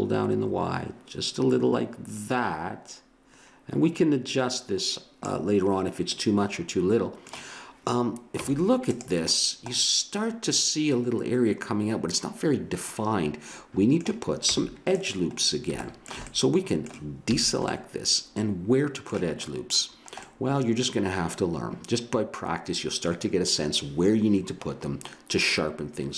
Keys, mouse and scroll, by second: 6.2 middle click, 7.1-8.4 middle drag, 8.4 Tab, 9.0 Tab, 9.3-11.4 middle drag, 14.5 Tab, 17.3 a, 19.9 middle click, 20.5-22.0 middle drag.